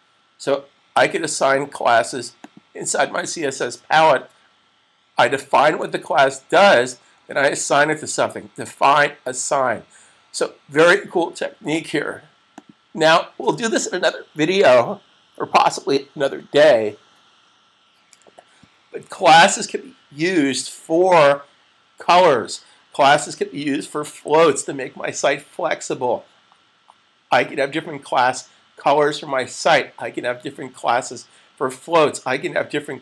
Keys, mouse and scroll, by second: 1.6 click, 3.8 super+s, 6.3 typing, 7.6 click, 12.5 click.